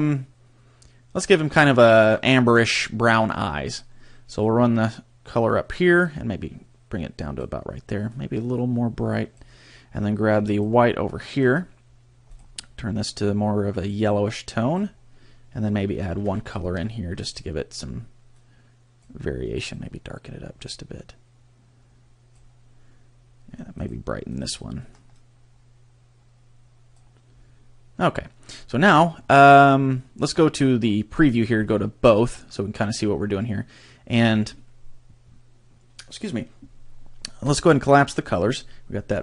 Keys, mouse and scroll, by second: 10.5 click, 11.3 click, 12.3 click, 16.4 ctrl+click, 17.2 click, 23.7 click, 24.3 click, 31.6 click, 37.5 click.